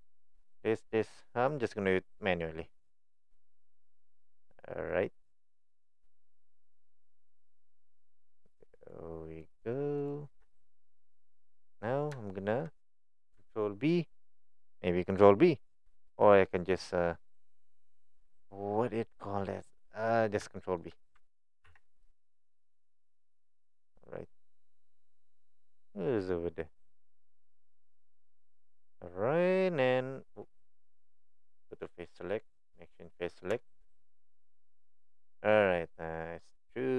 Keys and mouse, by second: 0.0 alt+shift+click, 0.7-3.3 alt+shift+drag, 4.2 alt+shift+click, 7.1 alt+shift+click, 8.0 alt+shift+click, 9.4 alt+shift+click, 10.0 alt+shift+click, 12.2 shift+middle click, 20.6 shift+middle click, 21.7 ctrl+b, 30.3-31.8 right drag, 31.8 click, 32.9 click, 33.7 shift+middle click.